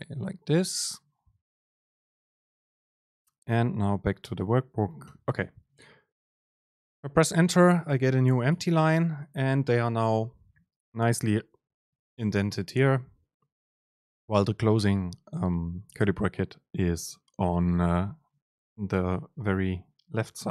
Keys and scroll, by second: 4.8 Return, 8.0 BackSpace, 9.1 Left, 11.4 Down, 11.7 Up, 12.2 Down.